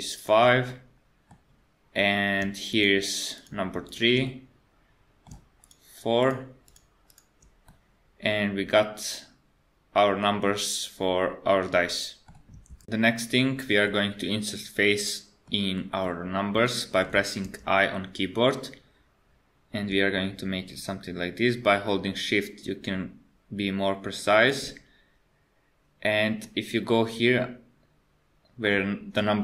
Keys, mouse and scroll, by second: 0.2 shift+click, 0.7 middle click, 2.7 shift+click, 3.3 shift+click, 3.8 shift+click, 4.2 scroll down 1, 4.3 middle click, 5.6 shift+click, 6.2 shift+click, 6.7 shift+click, 7.1 shift+click, 7.7 middle click, 13.9 middle click, 15.8 middle click, 16.2-16.6 scroll up 2, 16.6 middle click, 17.5 i, 26.4 middle click.